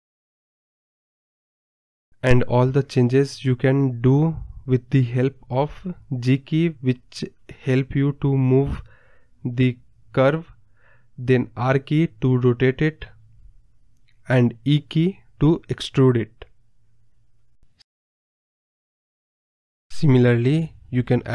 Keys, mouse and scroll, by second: 0.0 click, 0.5 middle click, 0.7 scroll down 2, 1.0 middle click, 1.5 e, 2.6-3.5 middle drag, 3.5 r, 4.9 middle click, 5.5 r, 6.0 e, 6.4-7.1 middle drag, 7.1 g, 7.4 r, 8.0-8.5 middle drag, 8.5 e, 9.2 middle click, 9.5 r, 10.0 middle click, 10.5 click, 10.7 g, 11.3 middle drag, 11.5 click, 12.0 g, 12.5 ctrl+z, 12.7 e, 13.1 middle click, 13.7 r, 14.8 middle click, 15.1 r, 15.6-16.9 middle drag, 16.9 e, 18.0 middle click, 18.3 r, 18.7 middle click, 19.0 e, 19.4 middle click, 19.8 KP_0, 20.2 g, 21.2 scroll up 3.